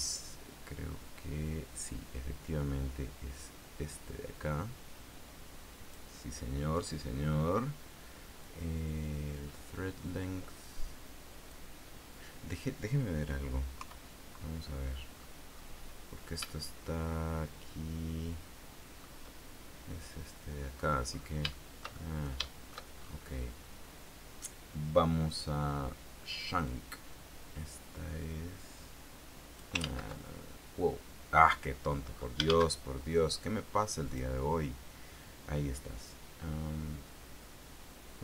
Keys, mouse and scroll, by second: 0.3-6.3 drag, 8.6-11.8 drag, 14.0 KP_3, 15.2-16.0 scroll down 2, 16.6-19.4 shift+middle drag, 21.2-21.6 scroll up 3, 21.6-23.0 shift+drag, 23.2 shift+scroll up 3, 26.8-30.0 drag, 30.0 ctrl+z, 31.8 scroll down 2, 32.3 scroll up 2, 32.6 shift+a, 34.2 click.